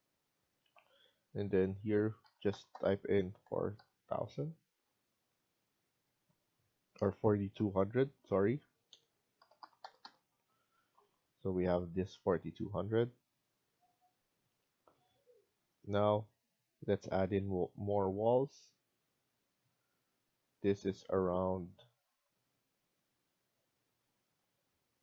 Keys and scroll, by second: 2.1-2.6 typing, 3.7 Return, 8.2-10.5 typing.